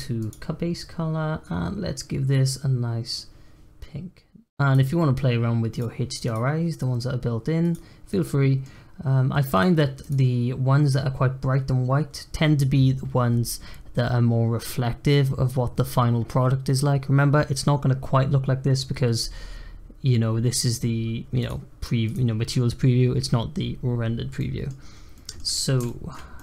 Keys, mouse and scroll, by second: 0.2 click, 5.7-8.0 drag, 8.0-9.5 middle drag, 9.5-12.5 drag, 24.3 middle click, 24.7-25.1 scroll down 1, 25.1 middle click, 25.5 scroll up 1, 25.8-26.4 shift+middle drag.